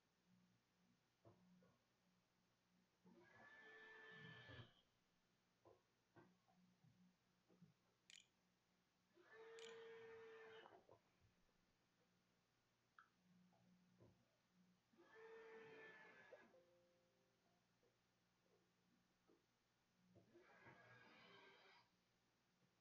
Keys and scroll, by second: 8.5 ctrl+z, 9.1 ctrl+s, 9.8 a.